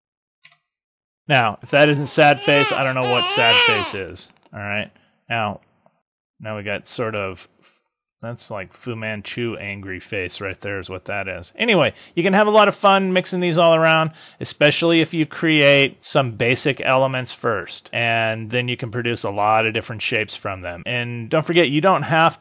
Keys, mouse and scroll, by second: 0.3 z, 5.5 click, 11.0 click, 12.1 click.